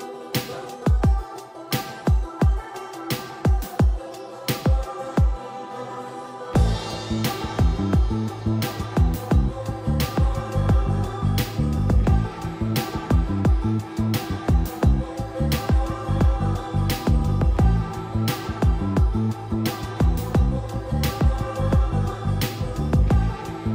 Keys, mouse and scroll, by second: 18.6 c, 19.1 click, 19.6-20.7 typing, 21.4-22.2 scroll up 1, 22.2-23.0 scroll down 1, 23.0-23.7 typing.